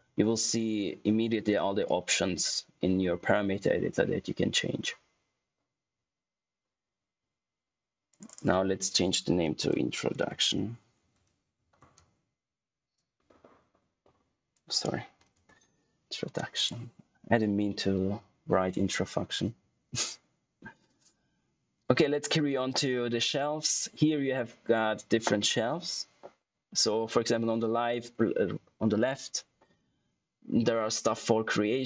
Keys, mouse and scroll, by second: 8.0 click, 9.2-13.1 typing, 15.3 d, 16.5 click.